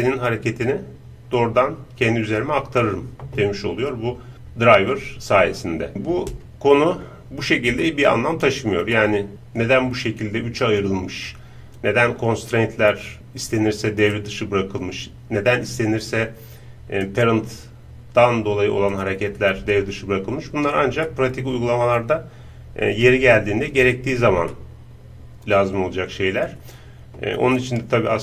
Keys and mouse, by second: 5.9-11.3 middle drag, 14.2-18.9 right drag, 19.0-21.1 drag, 21.1-24.1 middle drag, 24.6-26.5 middle drag, 27.6-28.2 middle drag.